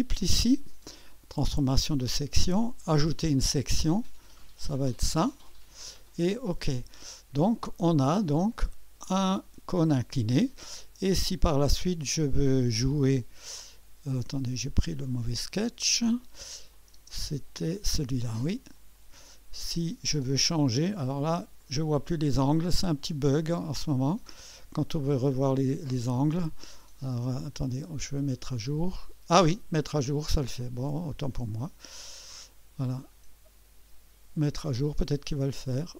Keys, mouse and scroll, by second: 2.9 click, 4.7 click, 6.4 click, 8.3 click, 9.4 1, 9.7 click, 11.2-13.1 drag, 13.3 click, 13.5 click, 14.6-15.6 drag, 16.7 click, 21.6 click, 23.8 click, 24.8 click, 27.5 click, 28.6 click, 30.8 click, 31.0 click, 35.0 click.